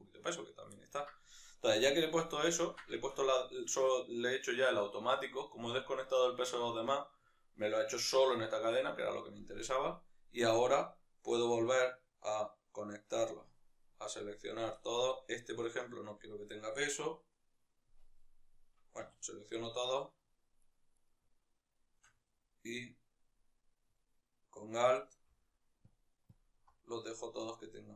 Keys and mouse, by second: 11.7 right click, 13.3 shift+right click, 13.5-17.7 shift+right drag, 17.7-19.3 middle drag, 18.7 a, 19.3 shift+right click, 19.9 shift+right drag, 20.3-21.6 shift+right drag, 25.7 alt+click, 27.1-27.9 right drag.